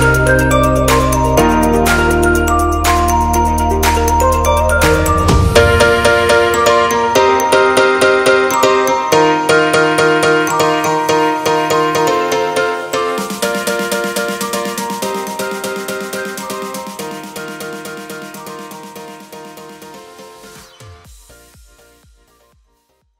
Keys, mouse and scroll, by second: 2.1 click, 3.9 alt+a, 4.6-5.5 scroll down 6, 5.3 middle click, 6.1 shift+middle click, 6.4 middle click, 7.0 shift+middle click, 7.5 Tab, 7.8 shift+middle click, 8.7 shift+middle click, 8.8 middle click.